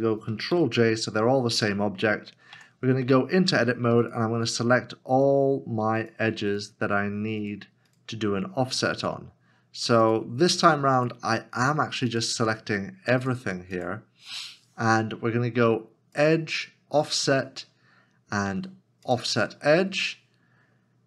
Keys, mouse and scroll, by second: 2.5 Tab, 4.0 alt+click, 5.2 alt+shift+click, 6.0 alt+shift+click, 7.4 alt+shift+click, 8.7 alt+shift+click, 10.0 alt+shift+l, 10.2 alt+shift+click, 11.0 alt+shift+click, 13.2 alt+shift+l.